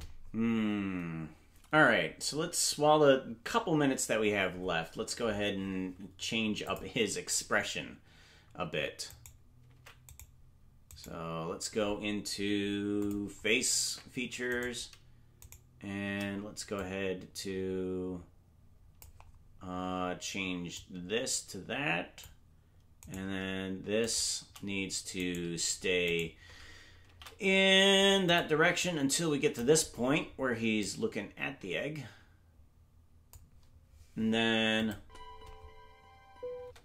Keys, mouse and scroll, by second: 6.6 click, 9.2 right click, 9.7 ctrl+Tab, 10.1 right click, 13.0 click, 13.8 ctrl+Tab, 14.7 right click, 15.6 shift+right click, 15.8 shift+right click, 16.7-19.0 drag, 20.7-22.2 drag, 23.1 right click, 24.1 shift+right click, 25.1 right click, 27.0 right click, 27.0 shift+d, 28.0 shift+right click, 28.8 click, 30.8-33.3 drag, 34.7 click, 34.9 space.